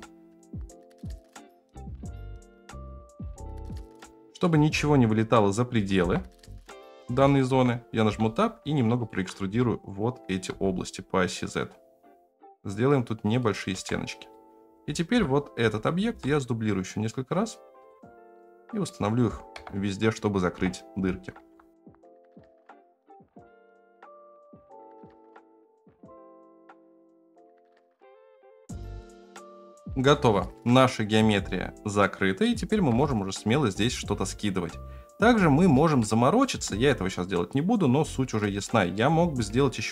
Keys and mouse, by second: 0.5 g, 1.7 middle click, 1.7-3.1 typing, 2.3 middle click, 3.9-4.4 middle drag, 5.7 s, 7.4 Tab, 8.0 2, 8.3 right click, 9.5 e, 13.7 Tab, 14.3 click, 15.1 KP_7, 16.1 shift+d, 18.0-18.8 middle drag, 19.5-26.8 typing, 22.1 shift+middle click, 24.0 middle click, 25.4 middle click, 25.7 middle click, 26.7 middle click, 27.1 click, 27.5 click, 27.7 shift+middle click, 28.2 shift+click, 28.8 shift+click, 29.2 middle click, 29.8-30.1 middle drag, 30.6-32.5 middle drag, 32.9 KP_0, 36.0-36.4 shift+middle drag, 39.0-39.4 middle drag.